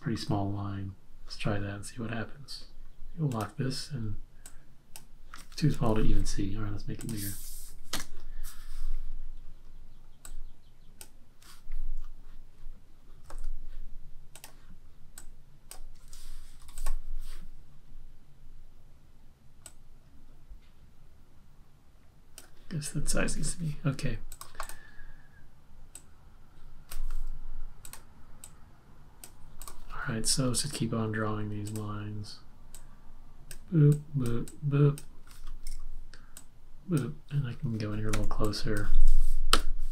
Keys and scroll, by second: 5.7 super+z, 7.6 1, 13.2 super+z, 16.7 v, 38.2 z, 39.6 v.